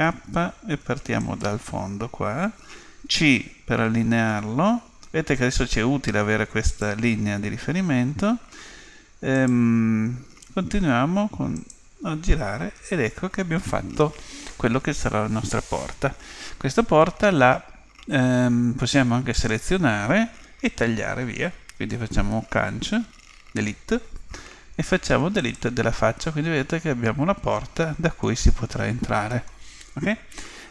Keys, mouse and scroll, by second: 0.0 k, 19.3-21.2 right drag, 23.0 Delete, 26.2-28.2 middle drag, 29.3-30.7 middle drag.